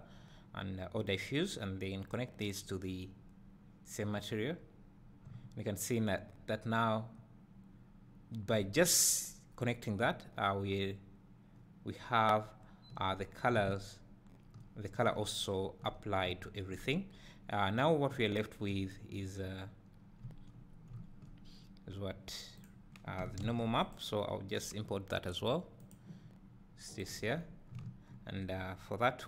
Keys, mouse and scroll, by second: 1.1-22.7 drag, 4.4-5.3 scroll down 2, 5.3 `, 23.5 shift+d, 27.2 click.